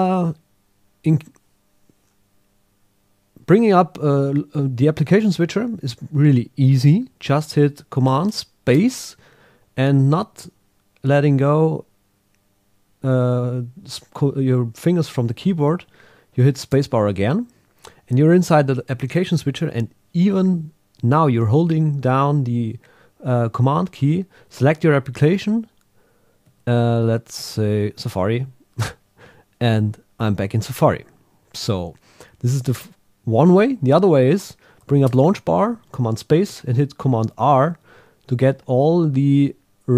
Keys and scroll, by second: 24.3 super+Down, 25.2 super+Up, 26.4 super+Down, 27.4 super+Up, 28.2 super+Down, 37.3 super+r.